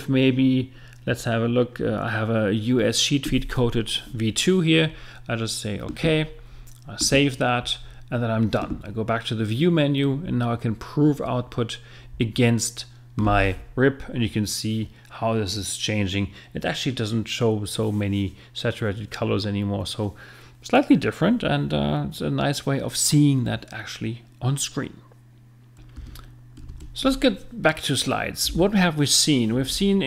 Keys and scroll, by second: 28.4 Right.